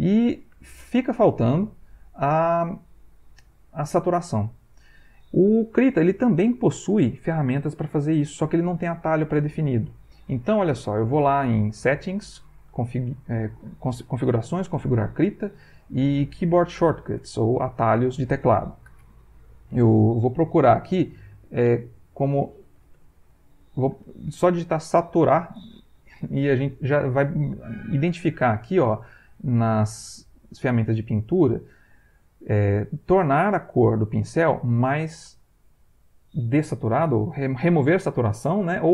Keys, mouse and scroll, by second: 0.5 Escape, 1.3 middle click, 11.2 click, 12.5 click, 18.0 click, 22.1-23.5 typing.